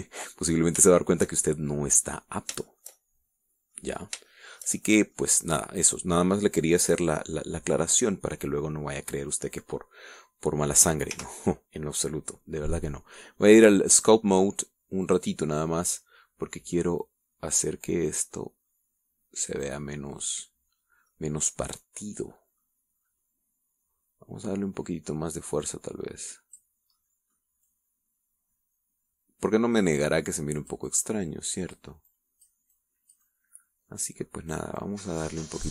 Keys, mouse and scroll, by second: 0.2 scroll down 1, 0.5-2.0 middle drag, 2.1 shift+middle click, 2.6 shift+scroll down 1, 2.9 shift+middle click, 3.9-5.1 shift+middle drag, 5.1 scroll up 1, 5.5 shift+middle click, 6.0 shift+scroll up 1, 6.0 shift+middle click, 12.4 t, 15.2 click, 16.3 click, 18.2-21.7 drag, 22.0-22.3 scroll down 2, 22.3-24.0 middle drag, 24.2-26.9 scroll up 2, 26.9-28.0 drag, 28.2-28.8 middle drag, 28.9-33.2 drag, 33.3 click, 34.0-35.7 drag.